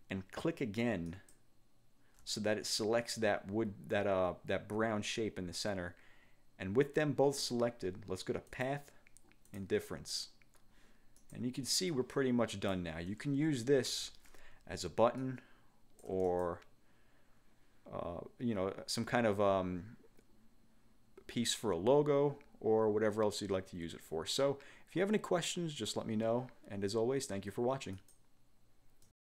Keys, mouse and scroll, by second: 1.2 alt+shift+click, 8.6 click, 9.6 click, 11.3 click, 12.1 click, 14.0 ctrl+g, 15.3-16.7 ctrl+shift+drag, 28.1 click, 29.2 click.